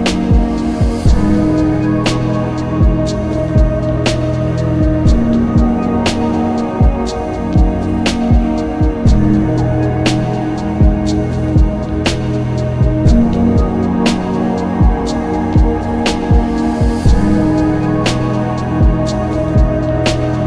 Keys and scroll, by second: 5.5 ctrl+z, 11.9 ctrl+shift+z.